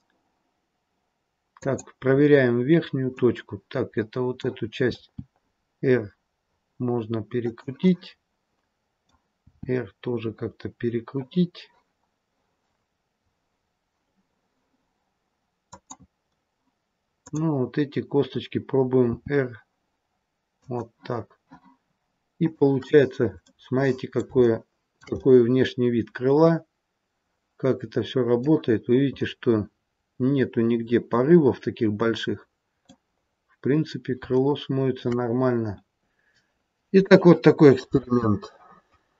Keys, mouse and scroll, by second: 2.2-3.0 scroll down 1, 3.0 middle click, 3.0-4.8 scroll down 1, 4.8 r, 7.7 middle click, 9.4 r, 17.1 click, 17.7-19.0 scroll down 1, 19.0 r, 21.2-22.1 scroll down 1, 22.1 scroll down 1, 22.3 click, 22.8-24.2 scroll up 3, 23.3 middle click, 24.3 shift+middle click, 25.1 middle click, 28.6-29.1 scroll up 3, 29.1 middle click, 33.1-33.7 scroll down 1, 33.7-34.1 scroll down 3, 34.3 shift+middle click.